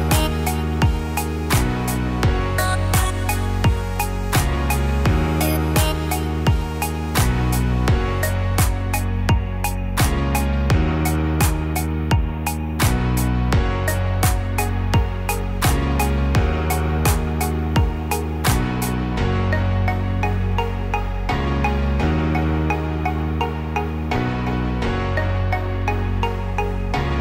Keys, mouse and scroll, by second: 3.2 Tab, 3.9 Tab, 5.1 a, 5.6 g, 9.5 click, 10.6 g, 13.1 Tab, 14.0 Tab, 16.4 g, 21.7 Tab, 23.6 click, 24.6 g.